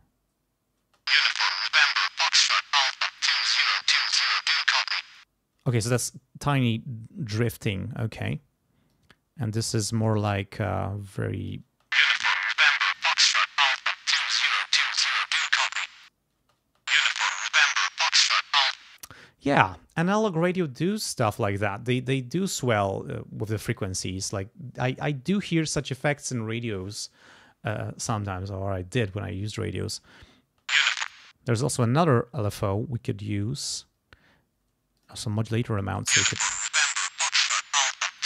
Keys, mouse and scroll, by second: 0.8 space, 2.2 click, 4.1-5.3 drag, 5.6 space, 8.2 click, 8.9-10.2 drag, 10.6 click, 11.7 space, 12.9 click, 14.1 click, 14.7 click, 15.9 click, 16.4 space, 18.8 space, 30.4 space, 35.0 click, 35.8 space, 37.1 click, 37.9 click.